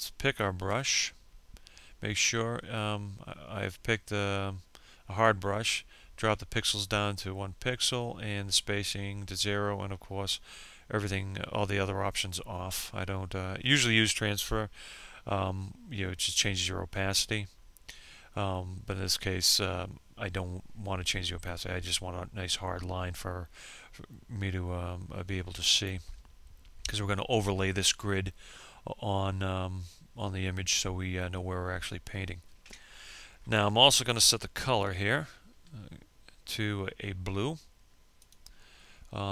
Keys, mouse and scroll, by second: 33.4 F6, 36.1 click.